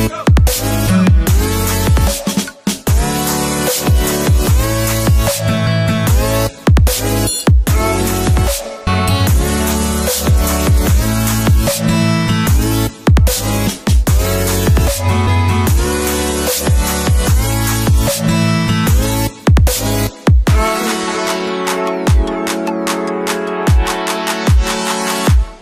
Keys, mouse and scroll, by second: 2.2-2.5 drag, 3.4 8, 4.5 Return, 5.8 click, 10.7-11.4 alt+scroll down 2, 11.8-12.5 drag, 13.3 right click, 14.5-15.5 drag, 17.7 right click, 19.5 click, 22.4 click, 23.4 space, 23.7-24.1 click, 24.0 space, 24.6-25.2 click, 25.4-25.6 alt+drag.